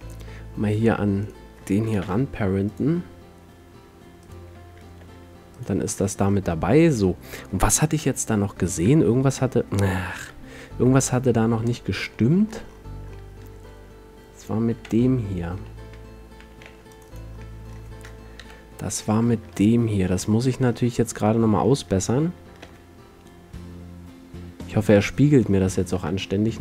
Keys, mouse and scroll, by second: 1.4 click, 2.2 ctrl+p, 4.4-7.4 drag, 5.2 g, 7.4 middle click, 7.6 click, 8.0 KP_7, 9.0 middle click, 10.3 KP_7, 11.4 middle drag, 12.1 middle click, 14.5 middle click, 14.9 Tab, 15.7 a, 16.1 a, 16.5 a, 16.8 c, 17.3 middle drag, 17.7 middle click, 17.8 click, 18.5 KP_Decimal, 19.3 middle click, 19.7 middle click, 22.7 shift+d, 24.8 click, 25.1-25.6 middle drag, 26.1 middle click, 26.3 middle click, 26.4-26.6 middle drag.